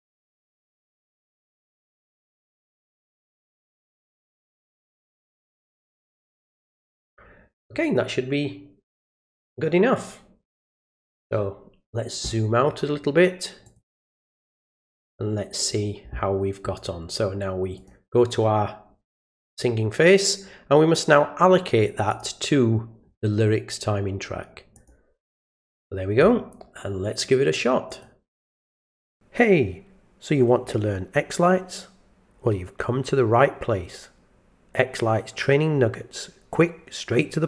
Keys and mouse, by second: 0.3 click, 1.1 click, 1.8 click, 2.6 click, 2.9 click, 3.2 click, 4.7 click, 5.1 click, 5.6 click, 6.1 click, 6.5 click, 6.8 click, 9.0-11.9 drag, 13.6 click, 14.2 click, 14.7 click, 17.8 click, 22.1 click, 24.7 click, 27.9 click.